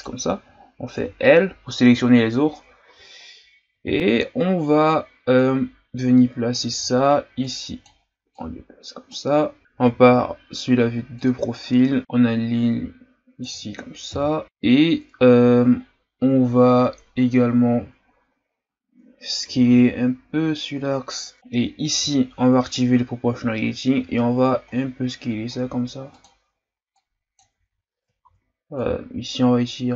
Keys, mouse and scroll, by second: 0.0 right click, 0.9 l, 3.0 z, 4.0-4.5 scroll down 2, 5.3-6.8 drag, 6.8 ctrl+z, 7.4-9.6 drag, 9.6 KP_3, 9.9 z, 11.1 click, 14.1 KP_1, 14.4 scroll up 4, 16.2-18.7 ctrl+scroll up 1, 19.4 s, 21.3 right click, 22.0 o, 24.0 s, 26.9 click, 27.5 ctrl+z, 28.2 ctrl+z, 28.8-29.9 drag.